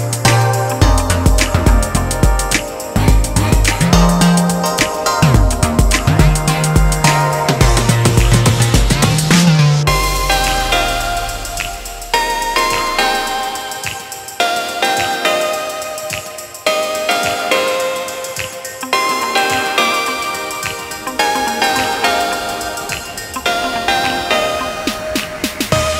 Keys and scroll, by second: 3.7-4.4 typing, 14.1 [, 14.4 [, 23.6 [, 23.8 [, 24.0 [, 24.2 [.